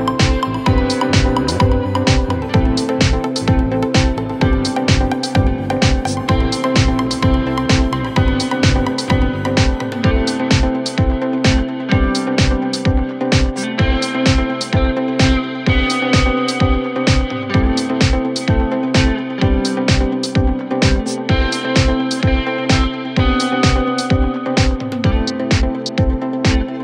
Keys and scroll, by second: 0.8 Escape, 4.8 shift+Page_Up, 24.4 6, 24.4 Return.